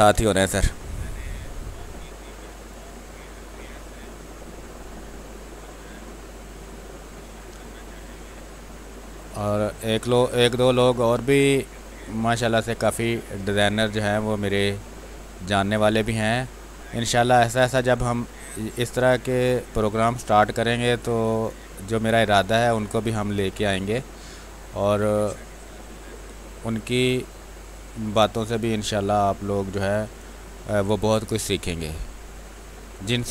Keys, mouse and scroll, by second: 0.1 space, 0.5 click, 0.6 space, 2.2-5.1 drag, 5.1-9.6 drag, 9.6-11.2 drag, 11.2 click, 12.0 click, 12.4 space, 12.7 click, 12.9 space, 13.5-15.0 drag, 15.0 x, 18.4-19.7 drag, 19.7 click, 20.4 x, 20.6-22.3 drag, 22.3 click, 23.5 space, 23.7 click, 23.9 space, 24.3 alt+click, 26.8 click, 28.0-29.9 drag, 29.9 space, 30.1 click, 30.4 space, 31.6 click, 32.2 space, 32.4 click, 32.7 space.